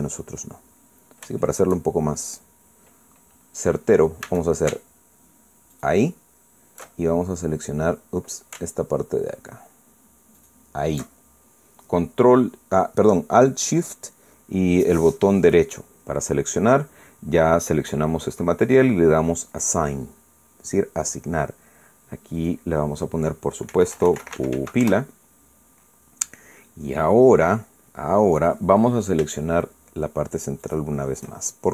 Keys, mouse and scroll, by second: 0.6-1.0 scroll up 2, 1.1-1.4 scroll down 2, 2.4 shift+middle click, 3.0 shift+scroll up 2, 5.2 a, 6.7 alt+shift+right click, 8.2 alt+shift+scroll up 4, 8.9 scroll down 2, 11.4 alt+shift+right click, 20.5 click, 23.4 click, 24.4-26.0 typing, 31.6 shift+right click.